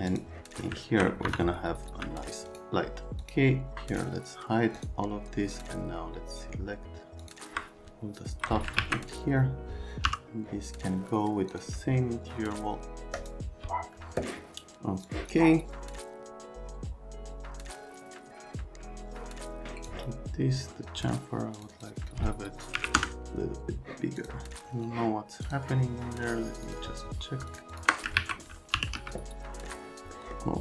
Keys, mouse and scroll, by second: 0.1 click, 0.8 middle click, 1.3 F3, 1.9 c, 2.5 right click, 3.2 click, 3.9 scroll, 4.7 click, 5.5 click, 7.2 click, 8.8 alt+q, 10.0 m, 11.5 click, 13.2 click, 15.0 click, 19.6 middle click, 21.6 middle click, 21.7 middle click, 22.7 KP_4, 23.0 KP_Enter, 24.2 click, 25.4 click, 26.6 click, 27.5 ctrl+click, 28.1 alt+q, 28.7 r, 29.0 z, 29.3 alt+middle click, 30.1 middle click.